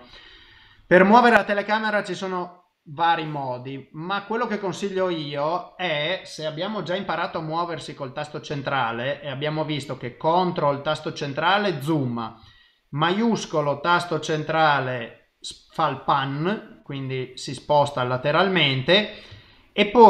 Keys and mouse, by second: 12.4 shift+middle click.